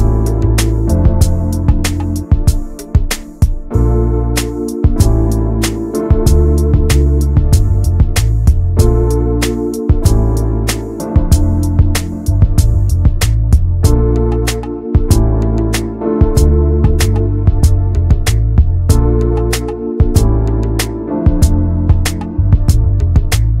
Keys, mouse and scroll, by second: 0.0 Tab, 0.5 shift+middle click, 0.6 scroll up 2, 1.8 s, 3.6 scroll down 2, 3.9 s, 4.4 Tab, 4.6 click, 4.8 scroll down 1, 5.0 middle click, 5.6 ctrl+s, 5.7 scroll down 1, 5.8 shift+middle click, 6.3 ctrl+s, 6.8 scroll down 1, 7.0 middle click, 7.4 ctrl+s, 7.6 middle click, 8.1 scroll up 2, 8.4 ctrl+s, 8.5 click, 8.8 Tab, 10.5 Tab, 10.7 click, 10.9-11.3 scroll down 2, 11.3 middle click, 11.6 ctrl+s, 11.7 click, 12.3 ctrl+a, 13.4 ctrl+j, 14.3 ctrl+a, 14.4 click, 14.6 middle click, 15.5 scroll up 2, 15.7 shift+middle click, 16.2 ctrl+s, 16.3 click, 16.6 Tab, 17.6 a, 18.5 right click, 19.0 scroll up 1, 19.4 middle click, 19.7-20.0 scroll up 1, 20.4 middle click, 20.8 ctrl+s, 21.1 click, 21.2 scroll down 1, 21.4 middle click, 22.3 Tab, 23.2 click, 23.3 Tab.